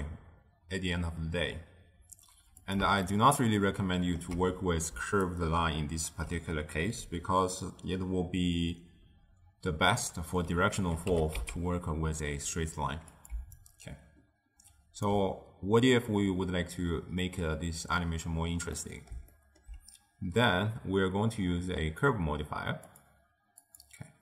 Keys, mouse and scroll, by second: 3.0-4.9 ctrl+middle drag, 4.9 d, 5.2-6.0 drag, 6.0 d, 6.2 d, 11.0 g, 13.3 d, 13.5-15.0 right drag, 15.0 d, 18.7-22.3 middle drag, 22.8 click, 23.6-24.2 drag.